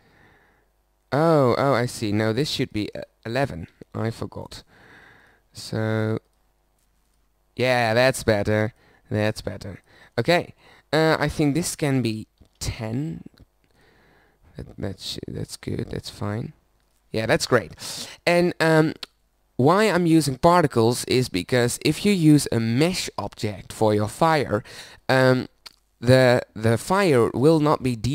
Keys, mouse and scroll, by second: 2.1-3.8 middle drag, 3.8 KP_1, 17.5-18.8 middle drag.